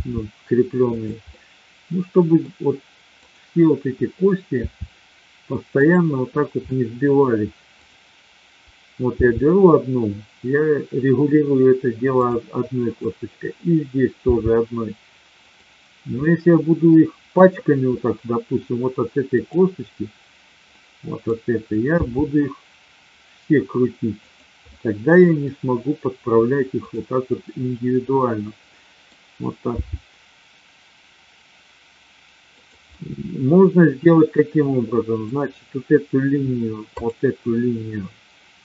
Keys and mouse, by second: 1.2-2.3 middle drag, 3.2-4.1 drag, 4.5 r, 6.7 middle click, 7.7 click, 9.1 g, 12.1 click, 14.2 g, 16.2-17.3 middle drag, 17.9-18.6 middle drag, 19.3 click, 20.6-21.2 middle drag, 22.0 r, 24.6-25.5 middle drag, 27.9-29.1 middle drag, 29.7 g, 32.6 click, 32.9-35.2 middle drag, 37.0-37.9 drag.